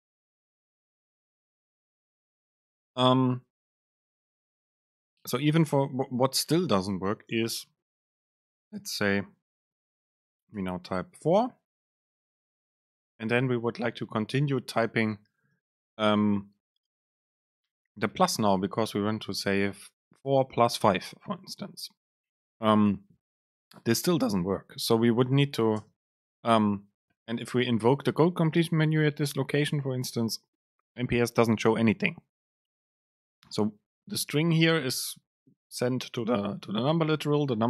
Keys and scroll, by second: 1.8 BackSpace, 6.7 Return, 7.4 super+space, 13.8 BackSpace, 15.7 super+space, 23.6 BackSpace, 25.9 super+space, 36.0 BackSpace.